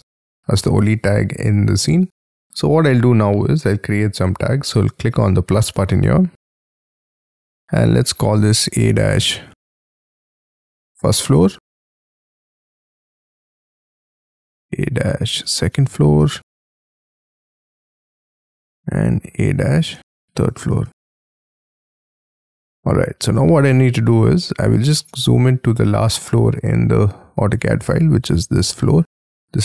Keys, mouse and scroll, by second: 1.2-1.8 scroll up 3, 1.8-4.7 scroll down 4, 7.7 a, 7.9 space, 8.3 -, 10.8-13.0 typing, 14.1-18.3 typing, 19.5-22.2 typing, 23.2-23.5 scroll down 6, 23.5-24.9 scroll up 26, 24.9 middle click, 26.6-27.2 scroll up 7, 27.2 scroll down 7.